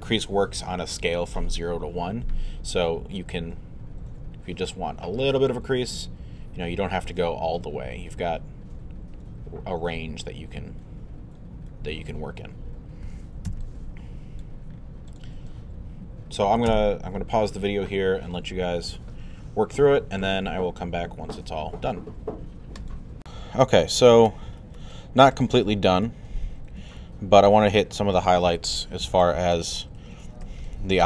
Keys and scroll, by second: 13.5 q.